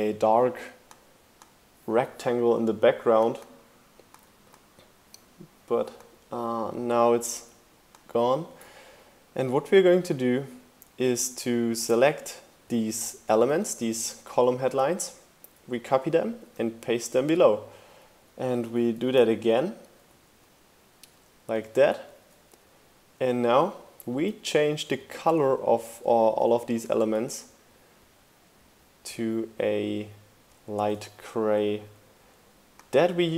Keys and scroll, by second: 13.6 super+c, 13.8 super+v, 14.1 shift+Down, 18.7 super+c, 18.9 super+v, 19.2 shift+Down, 20.9 shift+Up.